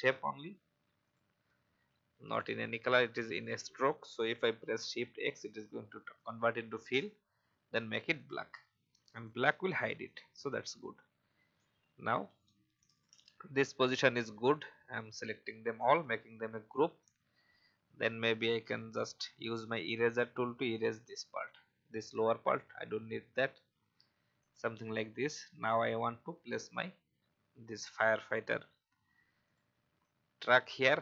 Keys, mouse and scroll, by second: 1.0 shift+click, 11.7 alt+scroll down 1, 12.7 click, 13.5 alt+scroll down 1, 14.4 click, 17.3-18.3 scroll down 1, 19.1-19.6 scroll down 1, 19.9-21.2 alt+drag, 22.5-23.0 alt+scroll down 1, 23.0-23.5 alt+scroll down 1, 23.8 alt+scroll up 1, 24.3-27.2 drag, 27.7-29.5 scroll up 1, 29.5-31.0 drag.